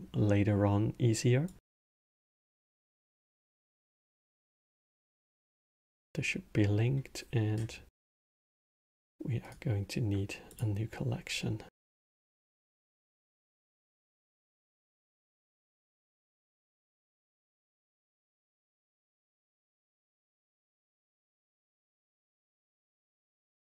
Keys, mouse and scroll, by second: 1.8 click, 4.0 click, 9.2-12.4 right drag, 12.4 click, 13.1 click, 13.2-16.3 drag, 18.4 t, 22.4-23.7 drag.